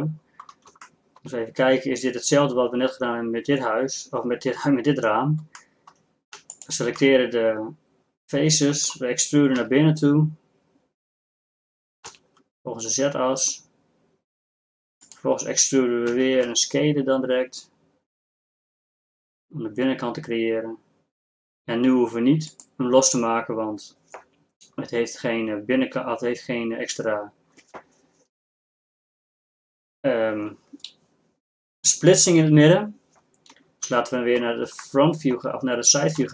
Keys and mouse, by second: 7.7-9.6 middle drag, 9.6 e, 12.8 click, 16.2 e, 34.0 KP_3, 36.2 z.